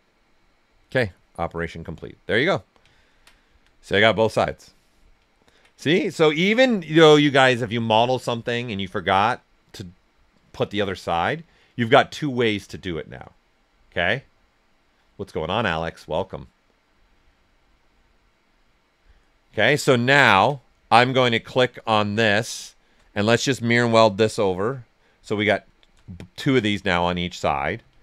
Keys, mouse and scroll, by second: 1.5-2.9 right drag, 3.8-12.4 right drag, 19.6 alt+right click, 20.0 ctrl+right click, 20.9 alt+click, 21.7 shift+f, 22.2 right click, 24.0 click, 24.6 right click, 25.6 alt+right click, 26.3 shift+f, 26.9 right click.